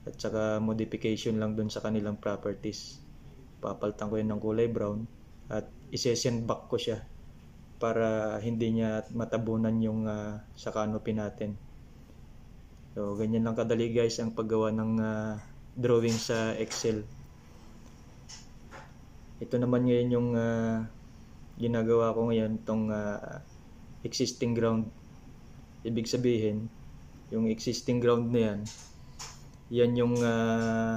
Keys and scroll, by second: 4.5 Right, 10.3 ctrl+c, 10.4 ctrl+v, 30.2 Delete.